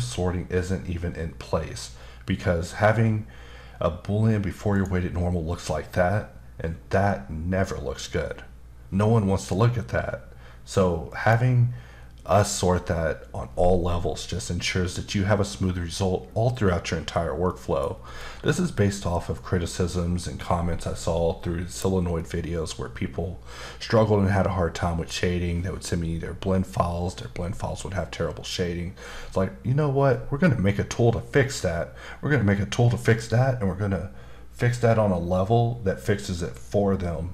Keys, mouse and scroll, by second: 4.7 click, 11.1 click, 17.5 middle click, 17.9 scroll up 1, 22.2 middle click.